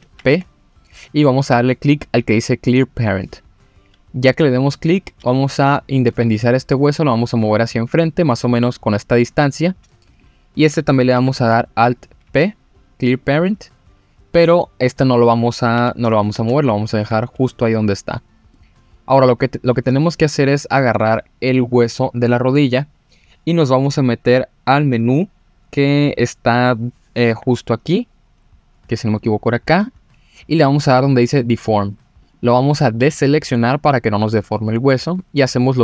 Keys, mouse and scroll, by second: 0.0 alt+p, 5.2 g, 10.1 click, 11.1 alt+p, 15.8 g, 16.3 ctrl+z, 18.5 middle click, 19.3-19.8 scroll down 2, 20.3 click, 29.1 click, 32.2 click, 32.8 middle click, 34.3 click.